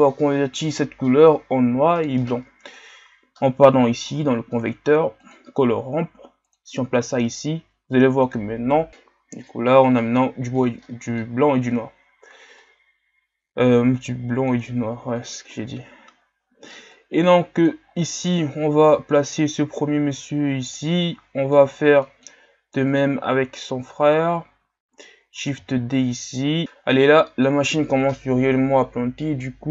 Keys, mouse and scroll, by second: 6.6-10.6 drag, 14.7 click, 19.5-21.1 drag, 21.1-23.0 middle drag, 23.0 click.